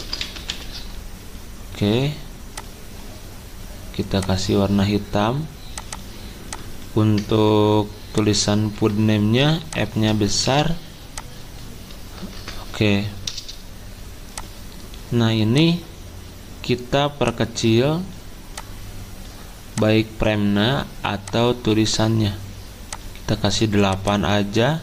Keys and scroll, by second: 0.0-1.0 typing, 5.3-6.0 typing, 7.2 BackSpace, 8.7 Delete, 10.5 f, 12.1 BackSpace, 12.2 BackSpace, 12.3 BackSpace.